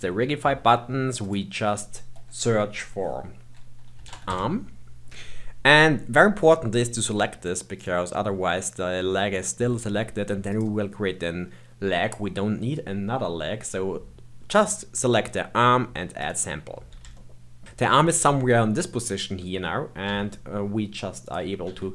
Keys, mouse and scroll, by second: 1.1-4.3 drag, 10.4 click, 16.1-17.1 drag, 17.1 shift+middle click, 20.0 g, 21.6 r.